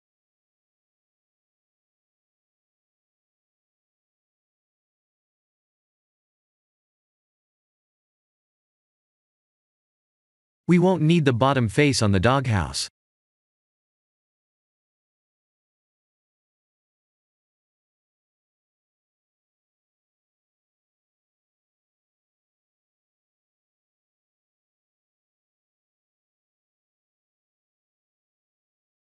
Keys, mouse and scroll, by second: 0.2 s, 0.4 z, 3.0 click, 3.8 ctrl+z, 4.3 click, 5.2 g, 5.5 y, 6.0 z, 8.0 click, 8.4 middle click, 9.1 g, 9.3 y, 10.9 click, 11.5 middle click, 13.5 click, 14.0 Tab, 14.3 3, 15.2 click, 15.2 x, 17.3 Tab, 17.6 middle click, 18.8 click, 20.1 click, 20.4 ctrl+a, 20.9 click, 27.7 click, 27.9 ctrl+a, 28.5 click, 28.7 x.